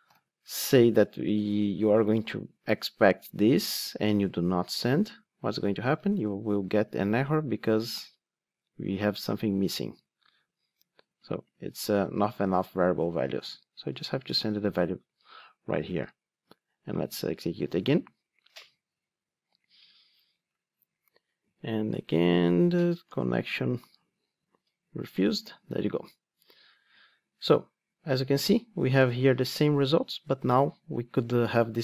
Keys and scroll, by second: 4.7 super+x, 6.6 ctrl+r, 17.5 ctrl+r, 23.6 ctrl+r.